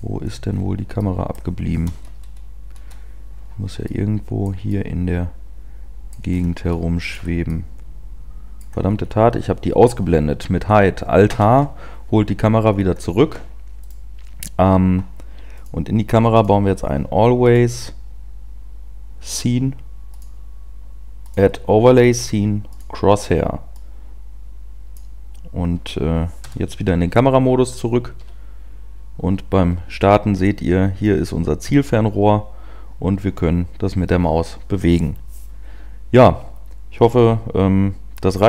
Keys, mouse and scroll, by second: 0.2 scroll up 1, 0.4 scroll down 1, 0.5 scroll down 2, 0.9 middle click, 2.0 KP_0, 2.8 KP_0, 3.8 middle click, 4.6 middle click, 6.3 scroll up 5, 6.7 shift+middle click, 7.5 middle click, 8.8 scroll up 1, 8.9-9.2 scroll down 4, 11.4 alt+h, 12.6-13.2 scroll up 3, 13.8 right click, 26.3 KP_0, 28.6-32.7 scroll up 1.